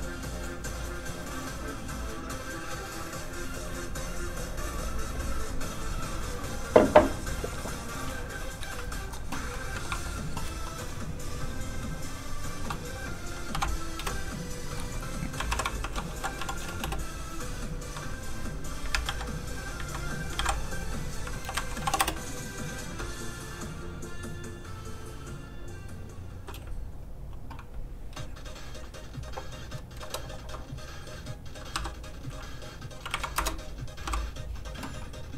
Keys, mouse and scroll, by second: 9.5 middle click, 9.9 shift+middle click, 12.1 middle click, 12.2 click, 13.5 shift+b, 14.0 Return, 14.4 click, 15.8 shift+r, 16.1 n, 17.7 Return, 17.7 click, 18.9 ctrl+a, 19.0 ctrl+c, 19.2 click, 19.5 click, 20.0 click, 20.3 ctrl+v, 21.5 shift+Left, 21.7 shift+b, 23.4 click, 30.0 KP_0, 30.4 Return, 31.7 i, 32.4 click, 33.1 KP_1, 33.3 Return, 34.0 i.